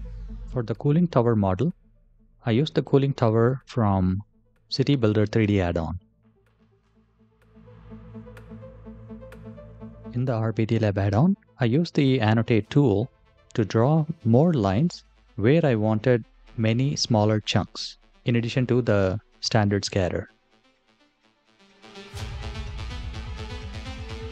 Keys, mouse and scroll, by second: 8.9 click, 9.8 click, 10.5 click, 11.0 click, 11.8 click, 13.7 click, 14.1 click, 14.5 click, 15.0 click, 15.6 click, 16.0 click, 16.7 click, 17.9 click, 18.3 click, 18.9 click, 19.2 click, 19.7 click, 20.3 click, 21.1 click, 22.0 click, 22.8 click, 24.0 click.